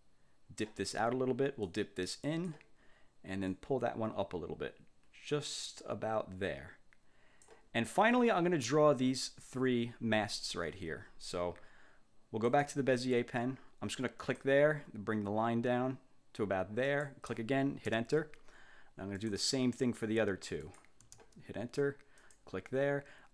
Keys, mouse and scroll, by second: 1.8-2.8 drag, 3.6-7.7 drag, 12.6 click, 14.3 click, 17.0 click, 17.9 Return, 19.3 click, 20.7 click, 21.1 Return, 22.3 click.